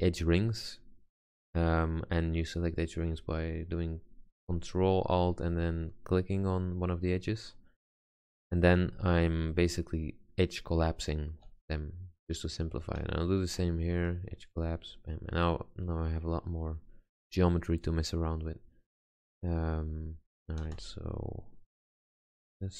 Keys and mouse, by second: 1.0-2.2 middle drag, 2.9-6.4 middle drag, 8.9 x, 9.6 x, 14.0 x, 20.1 click, 20.8 g, 21.8-22.7 middle drag.